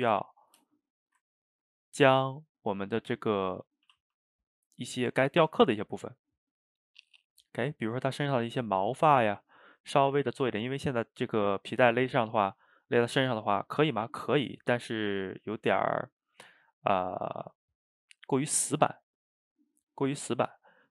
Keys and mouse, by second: 1.0-1.3 shift+right drag, 1.3-3.0 ctrl+middle drag, 3.0 click, 3.9 a, 4.1 a, 5.4-8.2 middle drag, 8.2 drag, 9.1 a, 9.3 a, 10.5-20.9 middle drag.